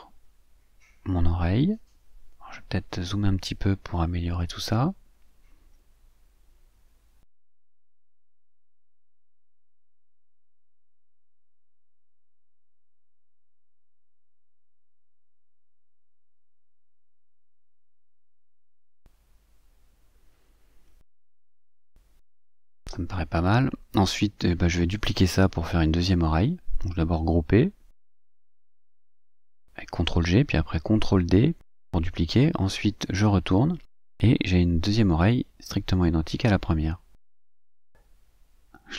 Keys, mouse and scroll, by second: 2.6-3.9 drag, 4.1-4.7 ctrl+scroll up 4, 6.2 click, 7.1 click, 7.8-9.4 drag, 9.9-11.4 drag, 12.1-13.7 drag, 14.3 click, 14.9 click, 16.3 click, 17.0-17.4 ctrl+scroll up 2, 18.1-19.6 drag, 19.9-21.9 drag, 22.1 click, 23.0 click, 23.5-24.1 ctrl+scroll down 2, 26.1 click, 26.9-27.9 drag, 29.8 ctrl+g, 31.1 ctrl+d, 32.8 click, 33.9-38.9 drag.